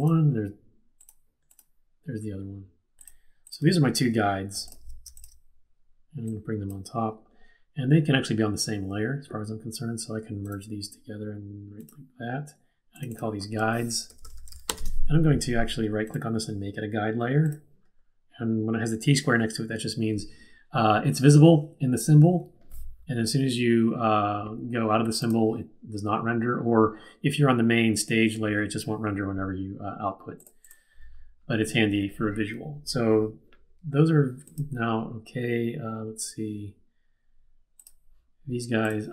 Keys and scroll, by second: 13.8-15.1 typing.